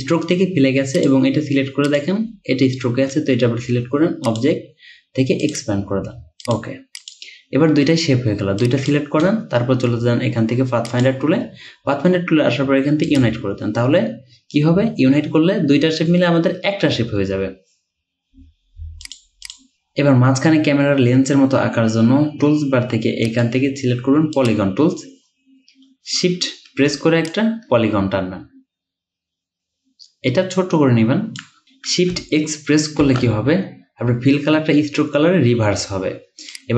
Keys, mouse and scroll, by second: 19.5 double click, 23.3 right click, 27.4 shift+click, 31.6 ctrl+z, 33.1 x.